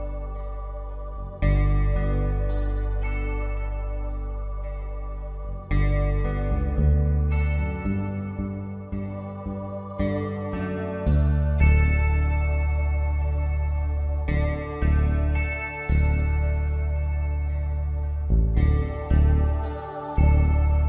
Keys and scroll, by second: 0.4 x, 5.5-7.4 typing, 8.6-9.8 typing, 11.0-12.0 typing, 13.8 x, 15.3 x, 17.7 ctrl+alt+z, 18.1-20.8 typing.